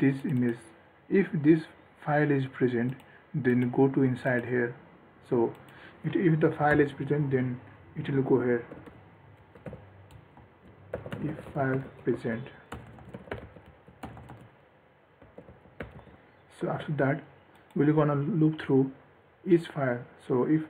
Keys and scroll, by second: 17.0 ctrl+s.